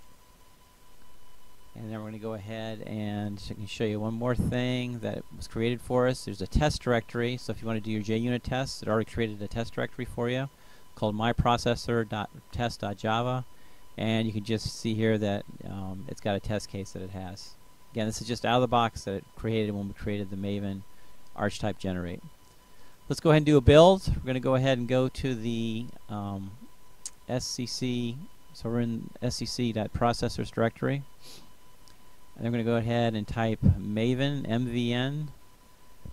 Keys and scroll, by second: 24.0 Return, 27.0-30.3 typing, 30.8 Tab, 31.3 Return, 31.6-32.5 typing, 35.1-36.1 typing.